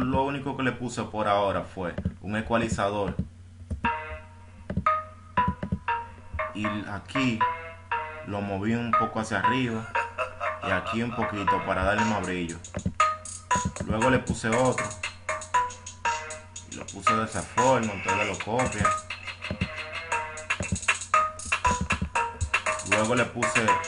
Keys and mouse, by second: 0.5 click, 2.4 click, 3.5 click, 10.6-12.0 drag, 13.6 right click, 16.2 right click, 19.7-22.2 right drag.